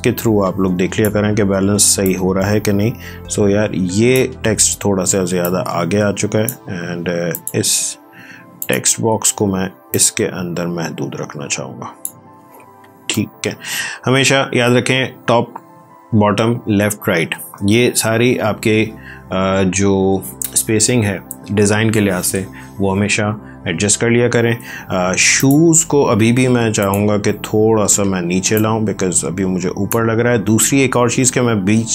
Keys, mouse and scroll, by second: 7.9 t, 8.5-14.1 drag, 14.1 ctrl+d, 17.1 ctrl+;, 25.3 click, 28.0 v, 28.5-30.4 drag, 30.4 space.